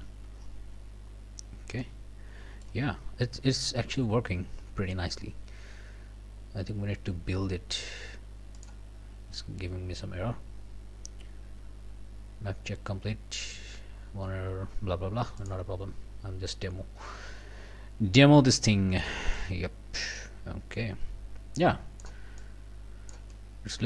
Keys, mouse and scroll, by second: 0.7 scroll down 2, 1.0 middle click, 1.8-2.8 right drag, 2.9 middle click, 3.4 middle click, 4.0-5.1 right drag, 8.6 right click, 15.4 click, 15.9 scroll down 1, 16.2-16.9 scroll up 2, 16.9 scroll down 1, 18.1 scroll down 2, 18.6 scroll up 2, 19.4-22.2 drag, 22.4 click, 23.3-23.8 right drag.